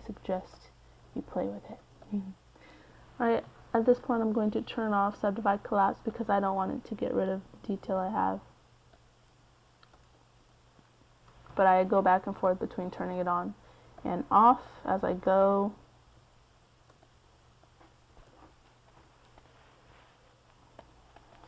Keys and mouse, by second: 5.9-7.2 middle drag, 20.6 f, 21.0 middle click.